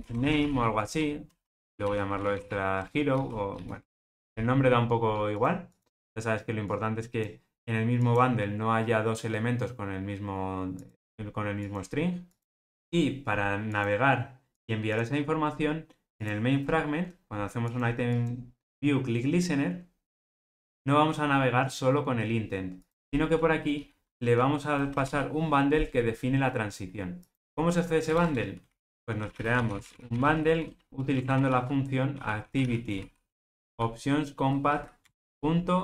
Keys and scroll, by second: 25.0 super+p, 35.1 Return.